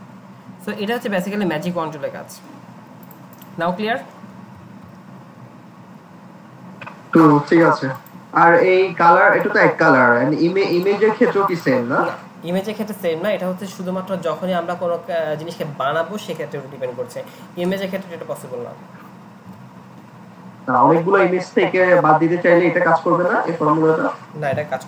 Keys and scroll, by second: 4.1 ctrl+a, 4.8 Delete, 8.4 alt+Tab, 9.8 alt+Tab.